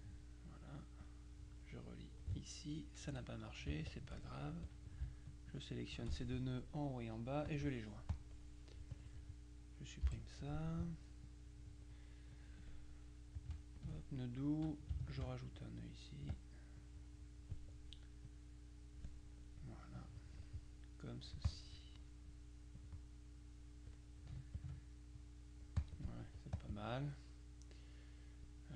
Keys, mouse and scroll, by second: 1.1-2.8 drag, 3.1 F2, 4.0 shift+click, 4.7 click, 5.6 shift+click, 7.5 click, 8.2 click, 9.0 click, 10.1 Delete, 11.3 click, 12.4-14.4 drag, 15.1 ctrl+alt+click, 16.4 click, 18.3 click, 20.1 click, 21.2 click, 22.9-24.4 drag, 24.6-26.4 ctrl+drag, 26.2 middle click, 26.6 click, 27.4 middle click.